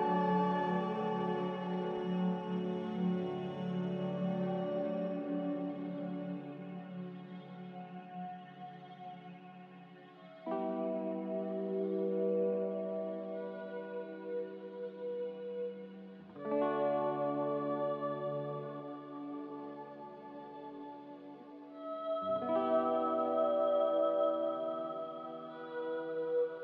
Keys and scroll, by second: 20.6 ctrl+b.